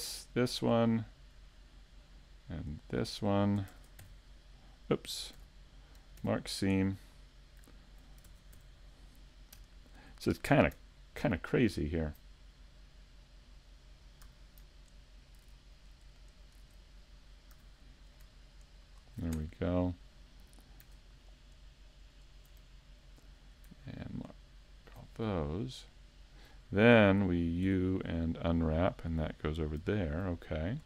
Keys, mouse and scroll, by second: 0.2 right click, 0.6 middle click, 1.5 shift+middle click, 2.9 shift+right click, 3.7 ctrl+Tab, 5.4 z, 6.2 ctrl+e, 12.6 middle click, 14.3 a, 16.4 alt+shift+right click, 17.6 a, 18.0 right click, 18.8 shift+right click, 20.5 middle click, 22.0 alt+shift+right click, 22.6 middle click, 24.7 alt+shift+right click, 25.1-25.5 scroll down 3, 25.5 middle click, 27.6 u, 30.2 scroll down 1.